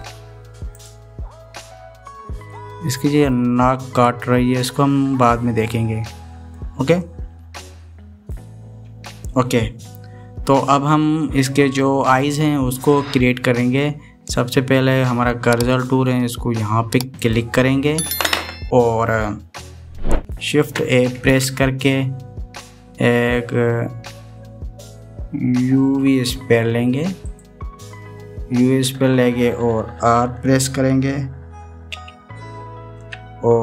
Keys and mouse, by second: 1.4 click, 3.2-4.1 middle drag, 5.7-7.3 middle drag, 7.8-8.8 middle drag, 8.8 KP_1, 18.0 click, 21.8 shift+a.